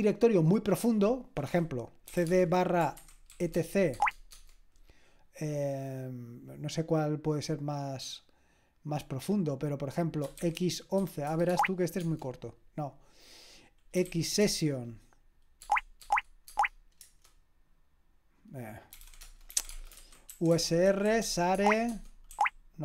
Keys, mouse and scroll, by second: 1.8-3.3 typing, 3.5 Tab, 4.0 Tab, 4.3 Tab, 10.4-12.0 typing, 14.1 shift+x, 14.4 Tab, 15.6 Tab, 16.0 Tab, 16.5 Tab, 17.0 Return, 18.7-22.8 typing.